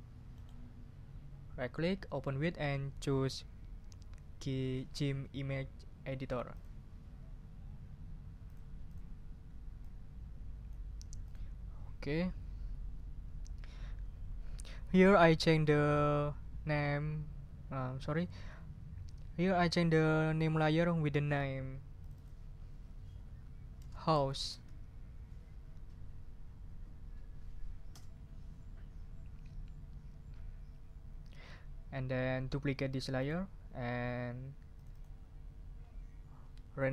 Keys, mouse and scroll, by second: 0.3 right click, 6.5 click, 8.4 click, 8.9 click, 9.8-10.9 drag, 11.2 click, 22.0 click, 23.5-25.0 typing, 27.9 Return, 33.2 click, 34.7 click.